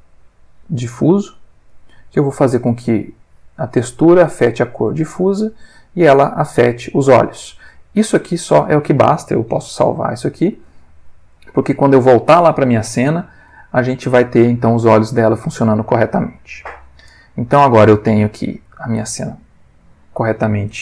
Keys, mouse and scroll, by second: 0.9 click, 1.6 click, 2.4-4.9 drag, 4.9 scroll up 1, 5.2-5.9 drag, 5.9-8.4 scroll up 1, 10.5 ctrl+s, 13.5 alt+F4.